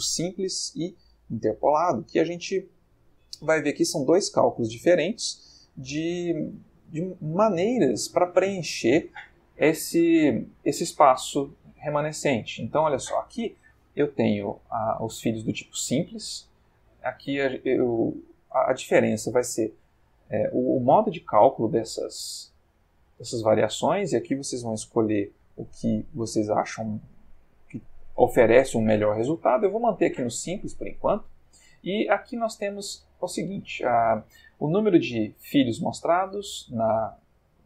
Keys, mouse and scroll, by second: 0.1 click, 1.3 click, 2.5 click, 3.3 click, 4.1 click, 4.6 click, 5.0 click, 6.7-7.8 middle drag, 7.9-8.5 ctrl+middle drag, 10.2 middle click, 11.3-12.0 middle drag, 12.0-12.8 ctrl+middle drag, 16.7 click, 17.4 click, 19.0 click, 20.5-21.5 middle drag, 22.6-23.7 middle drag, 24.6 click, 25.5 click, 26.6 click, 27.2 click, 28.0 click, 29.1-29.8 middle drag, 30.5 middle click, 32.7 middle click.